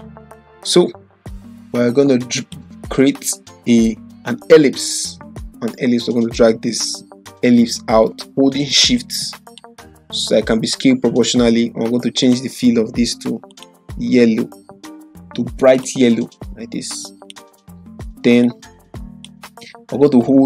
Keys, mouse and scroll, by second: 2.3 click, 2.6 click, 4.6-9.6 shift+drag, 12.2 click, 15.9-19.3 drag.